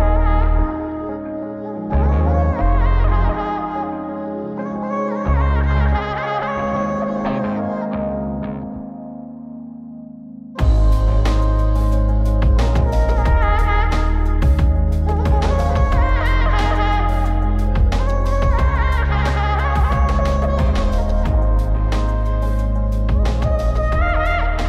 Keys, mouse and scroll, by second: 1.6 click, 2.8-5.0 drag, 5.7 g, 9.0 click, 10.7-13.6 drag, 14.7-16.4 drag, 17.3 click, 18.8-20.9 drag, 21.8-23.6 drag, 24.2-24.6 drag.